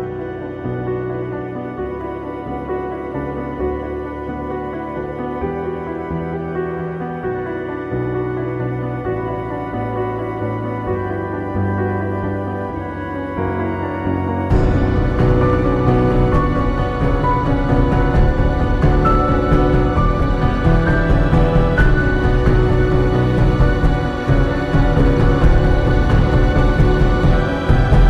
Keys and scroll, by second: 1.4 ctrl+j, 9.9 Up, 10.1 Down, 10.1 Up, 10.3 Down, 12.5 ctrl+g, 12.6 1, 12.7 Return, 25.8 ], 26.1 [, 26.2 ctrl+z.